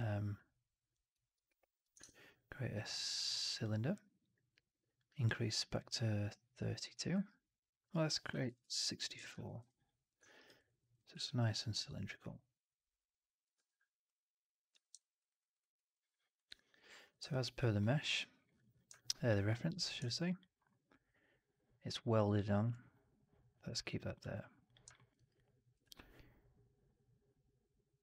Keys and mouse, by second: 1.9 shift+Tab, 4.9-10.3 drag, 8.3 BackSpace, 8.5 BackSpace, 10.2 middle drag, 10.2 right drag, 10.4 right drag, 10.7 middle drag, 11.0 r, 13.4 w, 14.6 f, 14.9 alt+drag, 15.2 alt+right drag, 15.4 alt+right drag, 15.6 alt+click, 24.0 click, 24.8 alt+middle click, 25.0 alt+right click, 25.2 alt+click, 27.6 middle click.